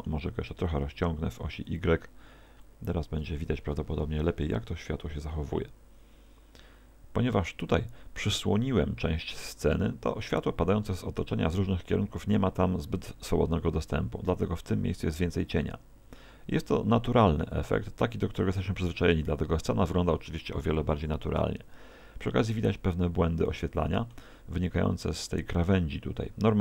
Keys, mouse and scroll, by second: 0.6 s, 1.8 click, 2.6 click, 3.8 KP_0.